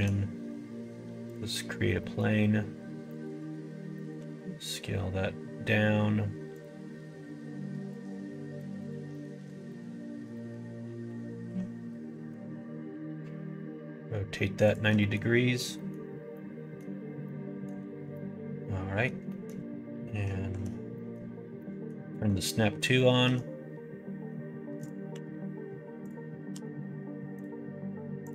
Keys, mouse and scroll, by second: 2.0 middle click, 3.1 middle click, 3.3 Tab, 3.9 middle click, 4.1 s, 7.8 click, 8.7 middle click, 9.0 middle click, 9.7 middle click, 10.3 middle click, 11.0 r, 14.9 middle click, 15.7 middle click, 16.3 middle click, 17.2 middle click, 18.1 middle click, 19.2 middle click, 20.4 shift+Tab, 20.9 middle click, 21.5 middle click, 22.1 middle click, 23.3 g, 25.0 s, 26.5 g, 28.2-28.3 drag.